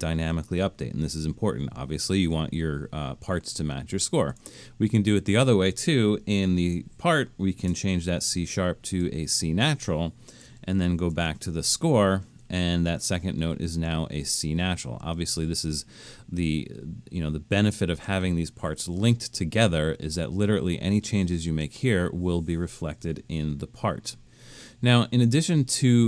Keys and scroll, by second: 7.8 -, 10.9 alt+super+/.